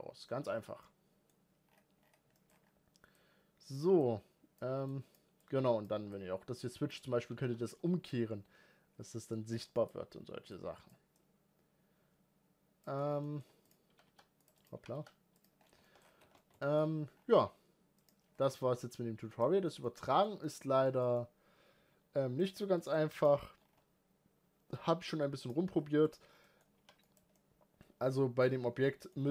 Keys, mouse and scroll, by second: 3.0-7.0 drag, 7.0 g, 10.3-12.8 drag, 12.8 scroll down 1, 13.0-13.4 middle drag, 13.4 click, 13.7 g, 14.3 click, 14.5 g, 15.4 scroll down 3, 15.6 shift+middle click, 15.8 scroll up 7, 16.0 alt+a, 16.1-16.6 middle drag, 16.6-17.7 scroll down 6, 17.7 click, 18.1-19.1 scroll up 4, 19.1 click, 19.4-22.2 shift+middle drag, 22.2-22.6 scroll up 3, 22.6-22.9 shift+middle drag, 22.9 click, 23.4-25.2 scroll down 5, 25.2 click, 25.5 scroll up 3, 25.8 click, 26.1 scroll down 3, 26.2 middle click, 26.6 g, 27.1-28.2 middle drag, 28.2-28.6 scroll up 1, 28.6 middle click, 28.9-29.3 scroll down 7.